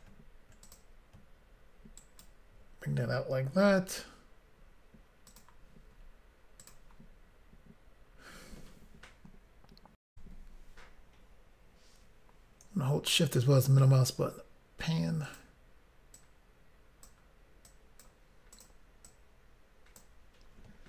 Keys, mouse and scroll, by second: 0.0 double click, 0.7 click, 0.8 click, 2.0 ctrl+right click, 4.9 s, 5.3 click, 5.5 click, 6.7 click, 6.8 click, 10.1 Insert, 13.0 shift+middle click, 14.1 scroll up 1, 15.2 click, 15.3 click, 16.1 click, 17.6 click, 18.5 click, 18.6 click, 19.0 click.